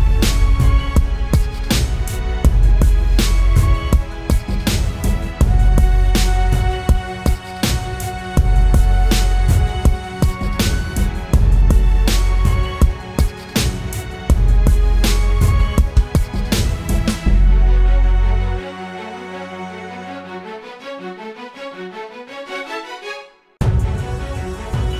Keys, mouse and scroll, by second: 0.1-0.6 typing, 1.8 typing, 3.1 typing, 3.9 double click, 6.2 typing, 10.5 double click, 13.5 typing, 14.4 double click.